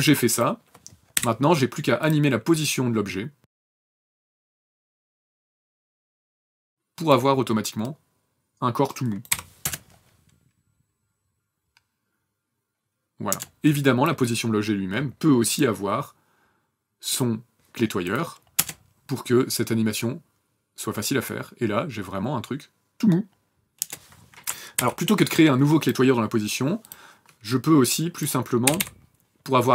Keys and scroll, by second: 1.0 p, 9.1 n, 9.5 KP_0, 13.1 KP_0, 18.4 KP_0, 23.6 KP_0, 24.6 ctrl+z, 28.5 e, 28.6 e.